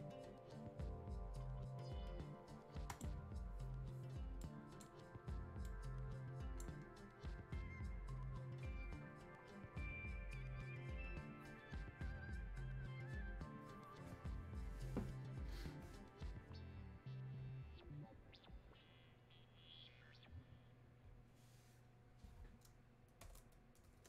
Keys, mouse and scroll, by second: 2.9-6.9 drag, 6.9-9.2 scroll down 1.